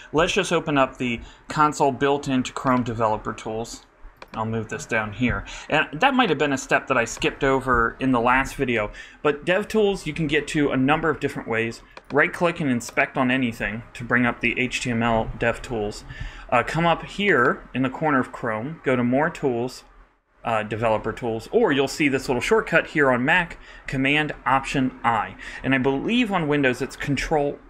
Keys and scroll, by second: 0.1 alt+super+i.